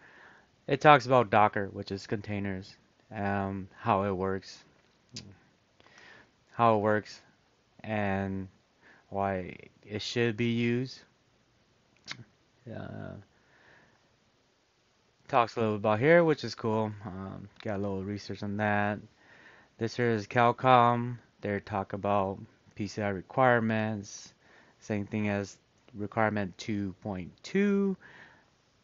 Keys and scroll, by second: 2.7-3.3 scroll, 5.8 super+-, 11.1-12.3 scroll, 12.9 scroll, 15.5-16.5 scroll.